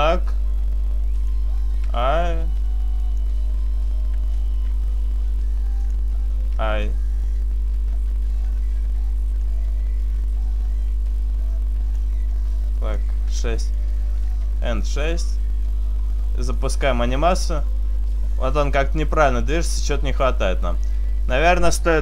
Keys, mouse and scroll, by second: 1.6 click, 1.7 i, 3.1 click, 4.5 r, 5.6 click, 7.4 i, 9.4 click, 12.4 click, 13.7 click, 16.4 click, 19.6 click.